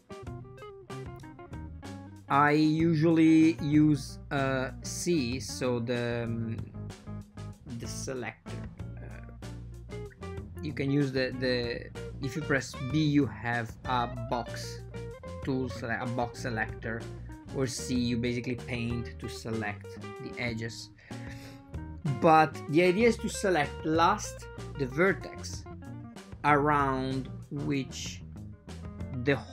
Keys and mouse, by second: 7.6 shift+click, 8.1 super+z, 8.5 super+z, 9.2 right click, 9.8 super+z, 10.3 super+z, 10.7 shift+click, 12.2 r, 13.4 r, 14.2 super+z, 14.4 r, 19.0 ctrl+middle click, 19.4 ctrl+middle click, 20.5 click, 23.0 b, 25.7 r.